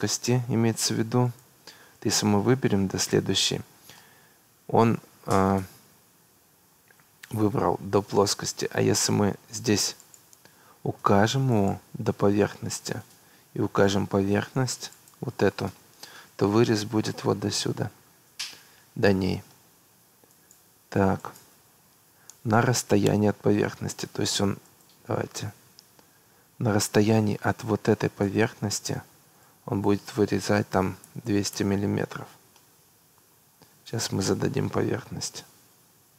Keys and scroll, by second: 30.8 2, 31.0 0, 31.5 Return, 35.5 Delete.